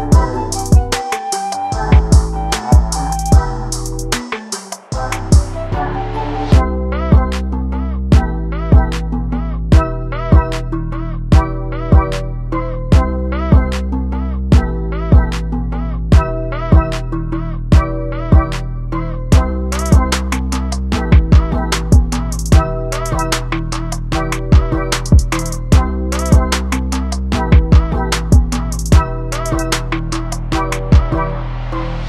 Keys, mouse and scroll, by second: 0.1-1.1 drag, 1.6 scroll down 1, 1.8 scroll up 1, 1.9-2.3 middle drag, 2.3 scroll up 1, 2.4 shift+middle click, 2.6 scroll down 1, 2.7 middle drag, 3.0 scroll up 1, 3.1 click, 3.2 Tab, 3.6 middle click, 4.4 click, 4.8 3, 5.1 middle click, 5.8 click, 6.7 KP_Decimal, 7.0 scroll down 1, 7.1 middle click, 7.7 scroll down 1, 7.8 shift+middle click, 8.2 scroll up 2, 8.4-9.8 middle drag, 9.8 e, 10.7 i, 12.5 middle click, 12.8 scroll up 1, 12.9 1, 13.2 shift+middle click, 13.3 scroll down 2, 13.5 middle click, 13.6 scroll up 1, 14.0 click, 14.3 click, 15.4 click, 15.8 click, 17.3 3, 17.5 click, 18.0 i, 18.1 middle click, 18.4 e, 18.6 click, 19.6 2, 19.6 scroll up 2, 19.7 middle click, 19.8 scroll down 2, 19.9-20.2 click, 20.3 s, 20.9 g, 21.6 middle click, 21.7 scroll up 2, 21.8 click, 22.3 3, 22.3 click, 22.4 click, 22.8-23.2 scroll down 5, 22.8 middle click, 23.0 middle click, 23.2 scroll up 3, 23.3 Tab, 23.4-23.7 scroll down 5, 23.5 middle click, 23.7 scroll up 1, 23.9 shift+middle click, 24.0 click, 24.1 middle click, 24.1 click, 24.3-26.1 typing, 24.5 middle click, 25.2 click, 25.9 click, 26.9 click, 27.0 click, 27.5 middle click, 27.6 scroll up 2, 28.0 3, 28.1 click, 28.2 ctrl+KP_Add, 28.6 s, 29.3 s, 29.4 s, 30.0-30.4 scroll down 4, 30.2 Tab, 30.4 scroll up 5, 30.4 middle click, 30.5 click, 30.6 Tab, 30.8 2, 31.0 middle click, 31.2 scroll up 1, 31.4 2, 31.5 click, 31.6 s.